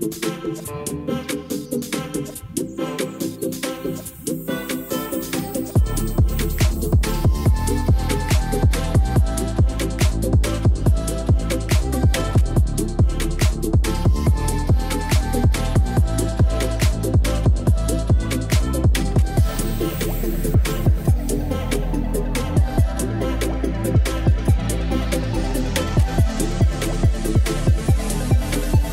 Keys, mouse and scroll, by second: 0.8 ctrl+s, 10.9 n, 12.9-15.2 drag, 13.2 o, 15.4 ctrl+z, 16.5 shift+a, 20.9 shift+d, 25.7 shift+a.